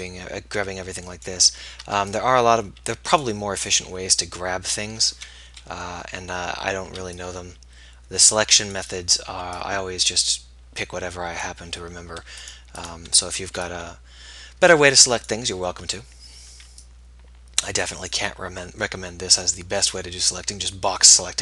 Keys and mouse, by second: 0.0 b, 2.0 b, 4.1 middle click, 5.7 KP_1, 7.2 b, 9.6 b, 13.8 b, 16.7 b, 16.9-19.0 middle drag, 20.2 middle click.